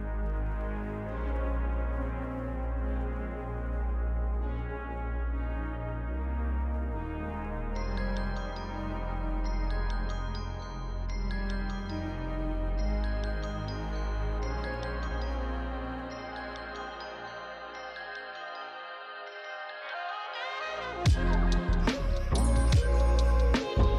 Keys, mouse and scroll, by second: 13.7 click, 17.6 click.